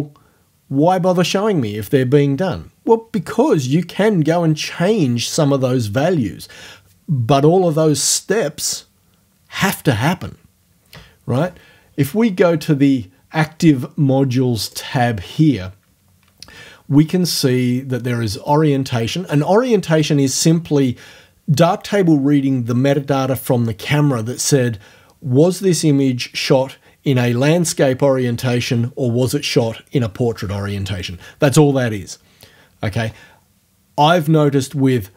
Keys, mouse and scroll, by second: 14.7 click.